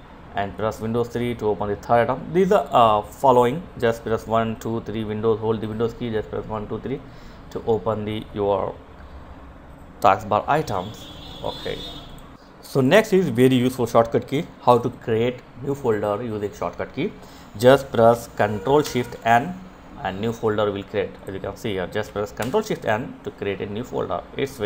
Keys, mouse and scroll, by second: 10.3 right click, 11.0 click, 17.6 ctrl+shift+n, 19.9 click, 21.2 ctrl+n, 23.2 click, 24.5 Delete.